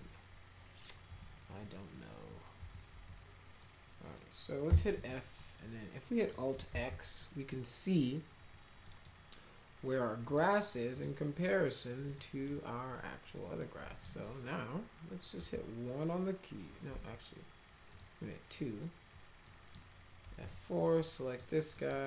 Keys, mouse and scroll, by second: 1.1 F3, 1.7 middle click, 2.6 F3, 2.9 F3, 3.6 middle click, 4.7 f, 5.0 z, 5.4 middle click, 6.0 middle click, 6.7 alt+x, 7.2 middle click, 8.8 middle click, 10.2 click, 11.0 click, 12.2 middle click, 13.3 middle click, 13.9 middle click, 15.4 1, 17.9 click, 19.4 middle click, 20.4 F4, 21.1 drag, 21.7 middle click.